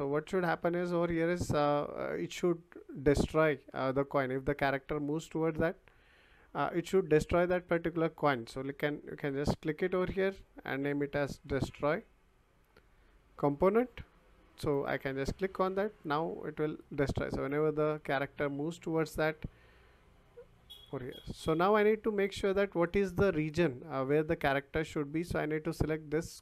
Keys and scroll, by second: 10.8-11.7 typing.